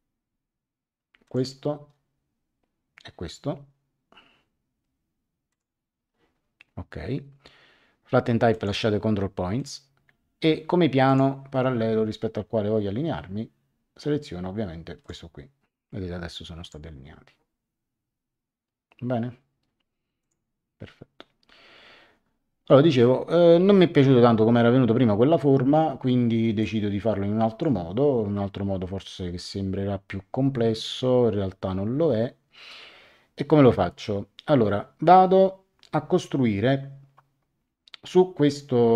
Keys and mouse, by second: 1.2 click, 5.4 click, 8.5 click, 9.6 click, 11.0 click, 15.0 click, 16.6 click, 20.2 click, 26.6 click.